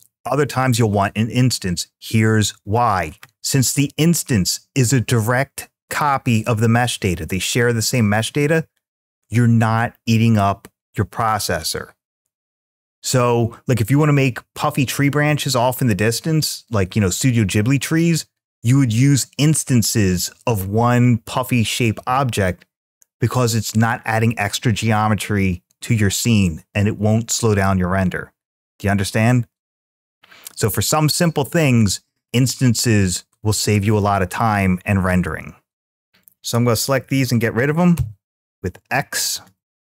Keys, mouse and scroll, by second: 36.0 click, 37.8 x, 39.7 click.